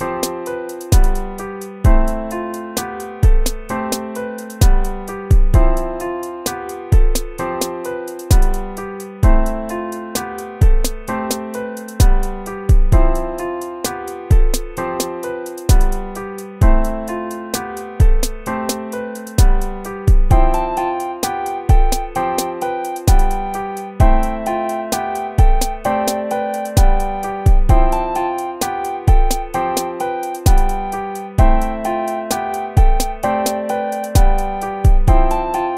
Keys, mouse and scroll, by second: 1.1 ctrl+-, 3.0 ctrl+-, 4.8 right click, 5.1 BackSpace, 5.8 BackSpace, 6.2 ctrl++, 6.8 BackSpace, 7.0 BackSpace, 7.6 ctrl+-, 9.1-10.5 typing, 10.8 ctrl+-, 12.4 right click, 12.8 ctrl++, 19.9 ctrl+-, 20.5 ctrl+-, 23.8 right click, 24.4 BackSpace, 24.6 ctrl++, 24.9 BackSpace, 28.1 ctrl+z, 28.6 ctrl+z, 31.2 ctrl+z.